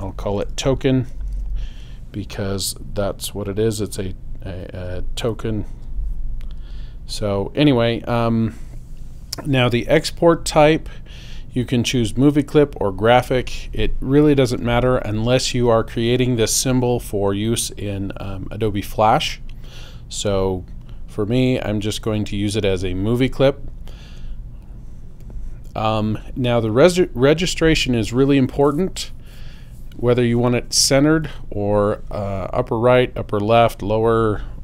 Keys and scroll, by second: 0.0-1.9 typing.